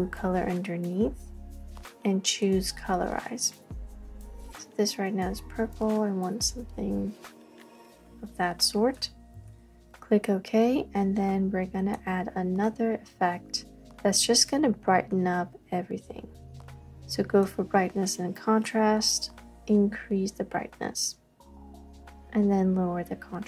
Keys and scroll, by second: 5.0 typing, 13.0 typing, 19.9 typing, 21.3 typing.